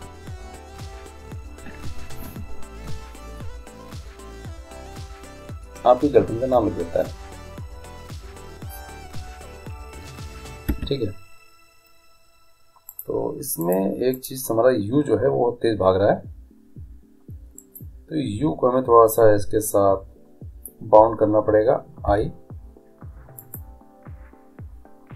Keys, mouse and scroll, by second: 10.8 Escape, 12.9-15.9 drag, 17.5-19.3 right drag, 19.2-20.8 drag, 23.5 i.